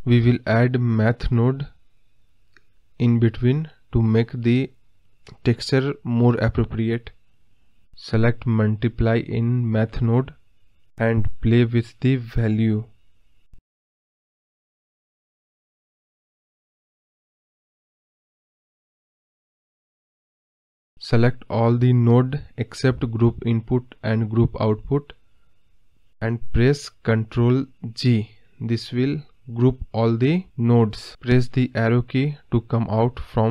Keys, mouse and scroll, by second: 11.2-14.3 drag, 15.7 g, 22.7-28.4 drag, 28.4 ctrl+g.